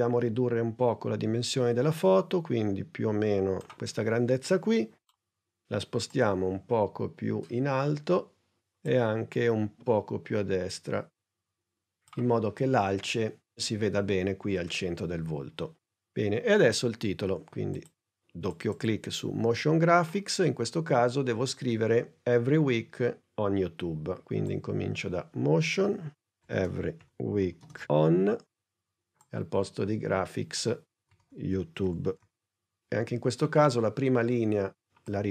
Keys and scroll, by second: 5.1 p, 26.1-27.9 typing, 30.9-32.7 typing.